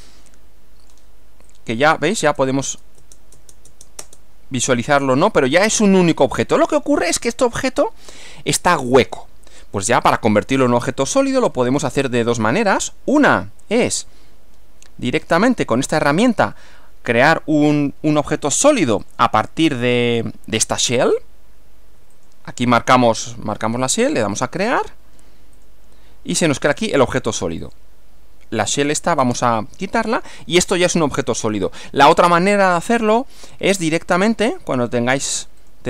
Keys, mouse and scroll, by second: 1.5 click, 2.2 space, 5.2-6.8 middle drag, 6.9-8.3 middle drag, 10.0 click, 10.7-12.4 middle drag, 15.5 click, 19.0 click, 22.1 ctrl+click, 24.3 click, 25.5 click, 26.7 click, 27.6 click, 29.2 space, 30.3-31.8 middle drag, 35.6 click.